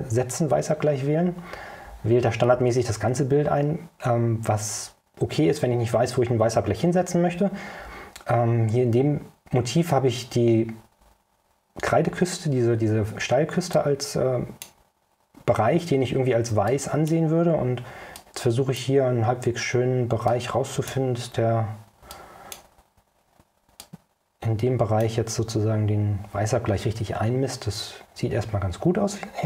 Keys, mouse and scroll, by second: 13.8-14.9 drag, 16.8-17.4 drag, 18.3-19.1 drag, 20.4-21.2 drag, 22.2-22.8 drag, 23.9-25.3 drag.